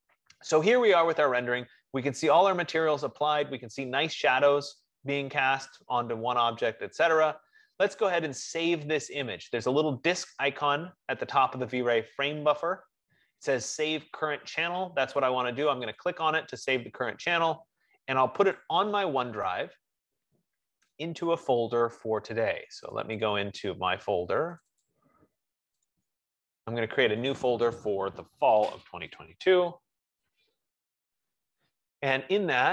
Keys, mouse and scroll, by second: 16.3 click, 18.7 click, 23.2 click, 23.6 click, 24.9 click, 25.3 click, 26.2 click, 26.4 click, 26.6 F15, 27.7 click, 29.0-32.1 typing.